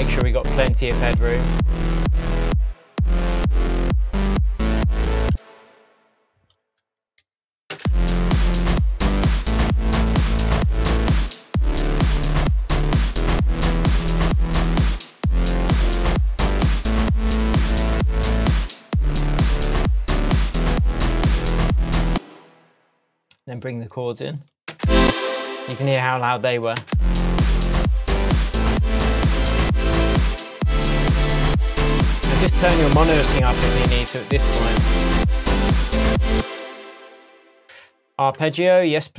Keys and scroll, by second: 1.1 Tab, 5.2 space, 7.2 super+l, 7.7 super+space, 22.0 space, 24.7 space, 26.8 space, 36.3 space.